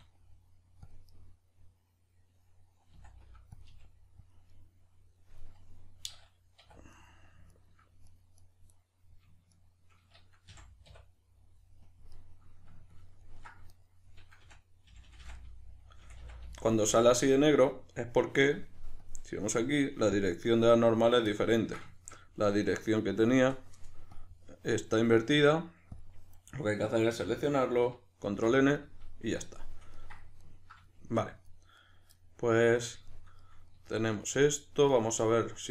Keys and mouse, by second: 0.9 click, 1.1-3.6 middle drag, 2.9 s, 3.6 click, 3.7 g, 4.3 click, 4.5-6.9 middle drag, 6.6 2, 6.9 right click, 7.5 shift+right click, 8.1 right click, 8.3 right click, 8.7 right click, 9.5 shift+right click, 10.5 f, 10.9 \, 11.8 KP_Decimal, 12.1-13.7 middle drag, 13.7 right click, 14.4 f, 15.4-19.0 middle drag, 16.0 f, 19.0-21.3 drag, 21.3-24.2 ctrl+middle drag, 24.2-28.8 drag, 27.1 a, 28.3 shift+n, 28.8-31.8 middle drag, 31.8 right click, 32.2-35.7 middle drag.